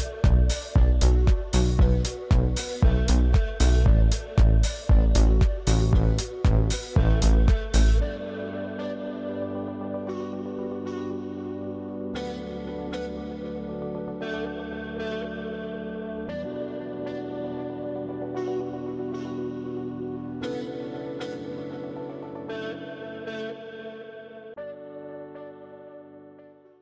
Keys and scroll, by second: 4.9 space, 9.2 space, 16.7 space, 18.7 ctrl+a, 20.6 space.